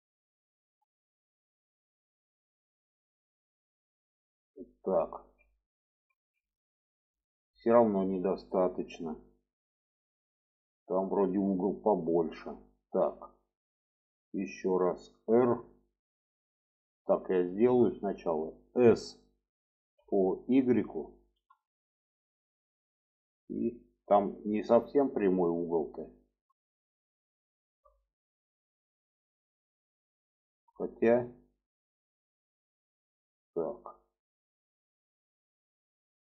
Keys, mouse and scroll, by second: 1.0 click, 4.0 click, 5.0 alt+z, 5.4 middle click, 6.1 alt+z, 6.2 alt+middle click, 7.4 alt+middle click, 8.8 shift+middle click, 10.8 shift+middle click, 11.9 shift+middle click, 12.8 click, 14.9 r, 19.5 s, 23.5 shift+middle click, 24.9-27.4 shift+middle drag, 33.2 r.